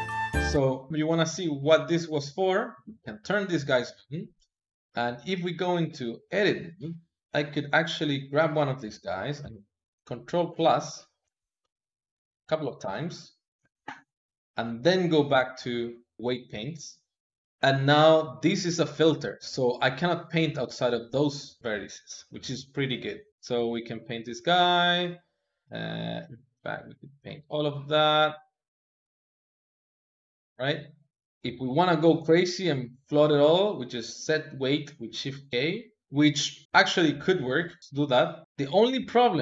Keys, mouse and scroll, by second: 0.3-1.6 middle drag, 3.2-5.8 middle drag, 5.8 Tab, 6.6-8.1 middle drag, 8.1 click, 10.3 ctrl+KP_Add, 10.7 ctrl+KP_Add, 11.1 ctrl+KP_Add, 11.5 ctrl+KP_Add, 12.7 ctrl+KP_Add, 15.2 Tab, 16.1-17.4 middle drag, 19.9-21.5 drag, 21.5 middle click, 22.0 ctrl+z, 22.5 middle click, 23.3 click, 23.5 middle click, 23.9 click, 24.1 middle click, 24.2 click, 24.3 middle click, 24.4 click, 24.6 ctrl+middle click, 25.2 click, 25.5 middle click, 25.6 click, 25.7 middle click, 26.4 Tab, 26.5 middle click, 26.7 shift+click, 27.3 Tab, 27.5 click, 27.7-29.2 middle drag, 29.2 Tab, 29.4 ctrl+KP_Add, 30.0 ctrl+KP_Subtract, 30.2 middle click, 31.2-33.6 drag, 33.9 click, 36.0-37.8 middle drag, 37.8 click, 38.4 middle click, 38.8-39.4 drag.